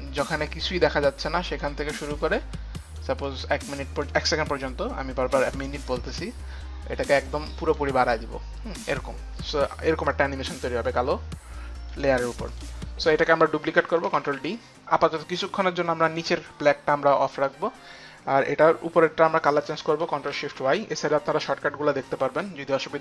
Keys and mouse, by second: 0.9 click, 2.7 click, 3.2 click, 4.7 click, 5.7 click, 7.4 click, 10.1 click, 12.5 click, 13.0 click, 14.1 ctrl+d, 14.1 click, 14.6 ctrl+d, 14.6 click, 16.7 ctrl+d, 16.7 click, 17.9 ctrl+d, 17.9 click, 18.3 ctrl+d, 18.3 click, 19.5 click, 19.9 ctrl+shift+click.